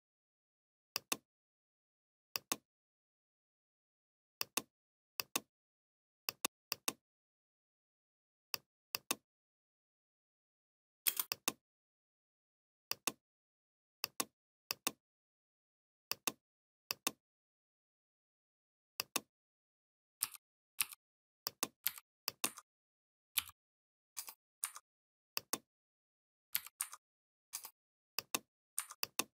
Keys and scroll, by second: 10.9 space, 20.1 i, 21.6 v, 23.2 l, 26.3 v.